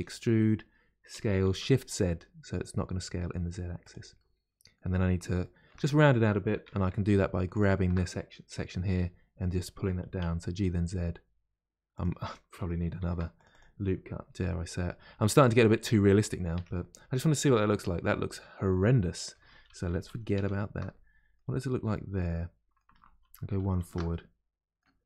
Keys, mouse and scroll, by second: 4.1 middle click, 4.9-5.3 scroll up 2, 5.4-6.6 shift+middle drag, 6.6 2, 7.5 alt+click, 8.9 g, 13.0 ctrl+r, 14.2 s, 15.7 middle click, 16.2 scroll down 2, 16.5 Tab, 16.7-19.5 middle drag, 19.5 ctrl+z, 19.7 ctrl+z, 20.9-22.0 middle drag, 22.0-22.3 scroll down 1, 22.3 middle click, 23.1 ctrl+shift+z, 23.6 ctrl+shift+z, 24.1-25.0 middle drag.